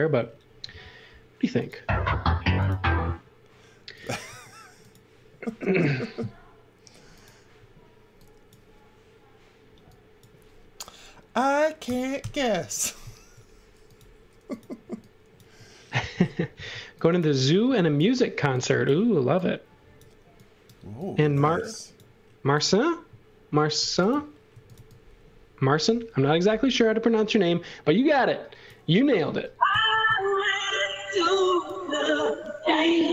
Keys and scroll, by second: 0.6 a, 4.2 space, 11.8 6, 12.1 Return, 14.8 e, 17.6 x, 18.4 e, 22.4 space, 23.8-25.2 typing, 29.7 super+z, 31.1 space, 32.9 m.